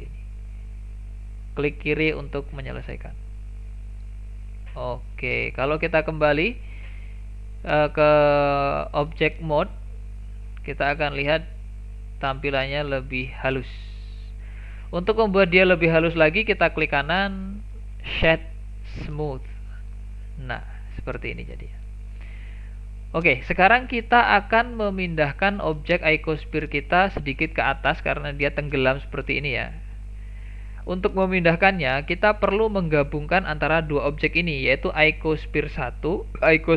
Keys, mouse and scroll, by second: 3.4-4.9 middle drag, 4.9-5.2 scroll down 2, 5.2-9.7 middle drag, 9.7 Tab, 10.5-13.7 middle drag, 16.7-20.2 right drag, 20.2-21.5 middle drag, 21.5-21.8 scroll down 2, 21.8-22.3 middle drag, 22.3-22.7 scroll up 3, 22.7-23.2 middle drag, 23.2 scroll up 1, 23.4-23.8 shift+middle drag, 23.8-24.1 scroll down 1, 24.1-24.8 middle drag, 24.8-25.2 scroll up 1, 25.2-28.1 shift+middle drag, 28.1 KP_1, 29.7-30.1 scroll up 1, 30.1-36.7 shift+middle drag.